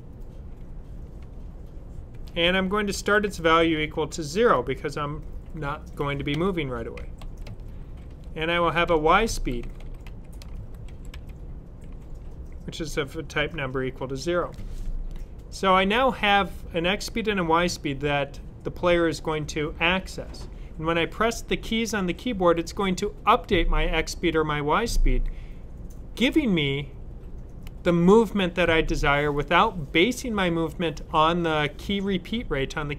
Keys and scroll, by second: 1.8-3.5 typing, 6.0-6.9 typing, 8.8-11.0 typing, 12.7-13.9 typing.